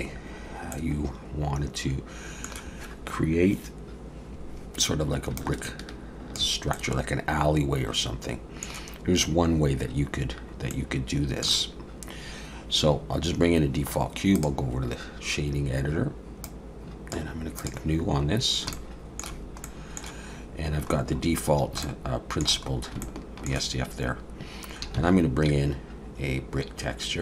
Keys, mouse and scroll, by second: 0.1-0.4 scroll up 2, 0.7 middle click, 0.7 scroll up 1, 5.4 ctrl+click, 6.7 middle click, 10.7 middle click.